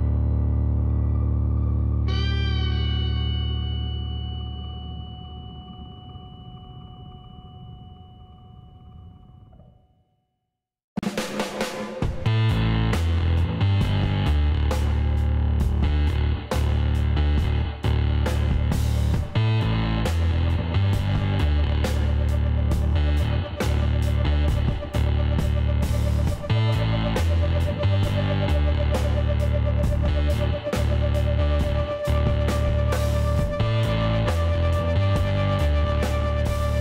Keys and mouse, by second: 2.5-5.9 drag, 5.9-7.5 middle drag, 7.5-9.7 drag, 8.7 x, 10.3 middle click, 12.1 middle click, 12.9-15.5 drag, 16.5-18.5 middle drag, 16.8 ctrl+z, 17.2 ctrl+z, 17.8 ctrl+z, 19.6-21.5 drag, 19.9 Tab, 21.1 a, 21.7-23.3 middle drag, 21.9 Tab, 23.7 middle click, 25.3 click, 25.6-27.7 middle drag, 27.7 click, 28.0 middle click, 28.2 click, 28.3-31.3 middle drag, 29.2 KP_3, 31.3-33.2 drag, 33.6-36.8 middle drag, 35.0 ctrl+r.